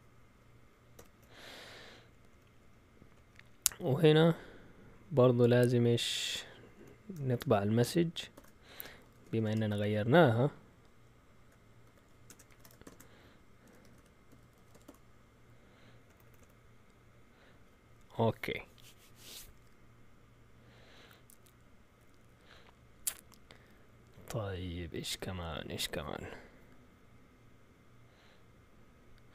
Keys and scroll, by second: 0.9 typing, 2.1 Up, 2.3 Up, 2.6 Up, 3.1 Up, 6.0 Up, 6.7 End, 7.3 Return, 8.3-9.8 typing, 11.6-16.4 typing.